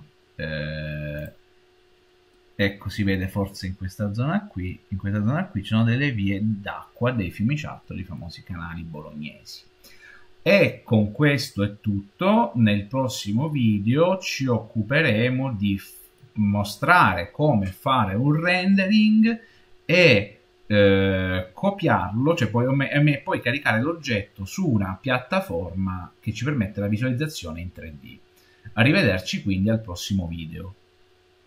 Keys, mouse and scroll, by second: 2.2-3.9 middle drag, 3.9-4.9 scroll up 5, 4.9-7.0 scroll up 4, 7.0 scroll down 3, 8.1 middle click, 8.4 scroll down 2, 9.5-10.9 scroll down 2, 11.3 shift+middle click, 11.7 shift+middle click, 11.9 shift+middle click, 12.5 middle click, 12.5-13.3 scroll down 1, 13.3-14.3 scroll down 3, 13.5 middle click, 13.8-16.3 middle drag, 16.3-17.1 scroll up 4.